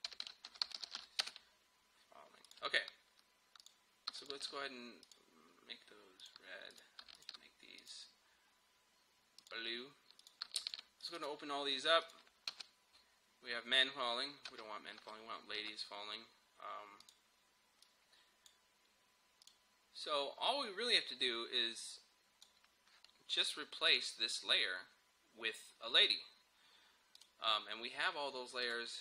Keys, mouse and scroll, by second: 0.6-1.4 typing, 2.5 click, 4.3 shift+click, 12.5 space, 14.5 space, 17.1-23.9 drag, 27.2 click.